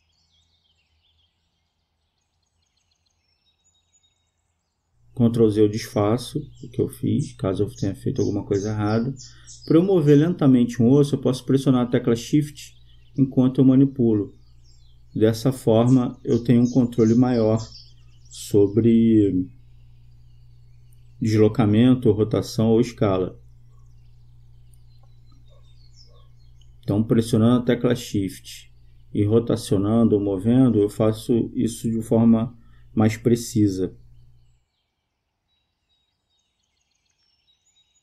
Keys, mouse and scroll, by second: 1.4-3.0 right drag, 2.7-4.0 drag, 5.0 ctrl+z, 15.0-16.4 right drag, 16.2-18.0 drag, 18.0-19.4 right drag, 19.0-20.2 drag, 22.5-24.2 right drag, 23.5 click, 24.2-25.4 drag, 25.4-26.8 right drag, 26.7 click, 27.1 click, 28.3 ctrl+z, 29.4 click, 35.0-36.5 drag, 37.6 right click.